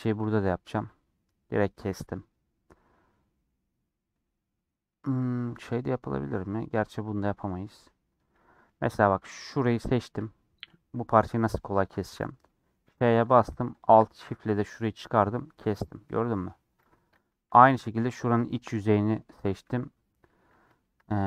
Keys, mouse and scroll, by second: 0.0 click, 0.6 ctrl+KP_Add, 1.4-2.7 middle drag, 2.7-3.1 scroll up 3, 3.1 scroll down 2, 3.4-6.4 middle drag, 7.6-8.1 scroll up 2, 8.1 shift+middle click, 8.8 3, 11.2-12.9 middle drag, 12.9 ;, 13.9 alt+shift+click, 14.3-15.4 middle drag, 15.9 middle click, 16.4 scroll up 2, 17.3 3, 20.7 shift+middle click, 20.9 scroll down 1.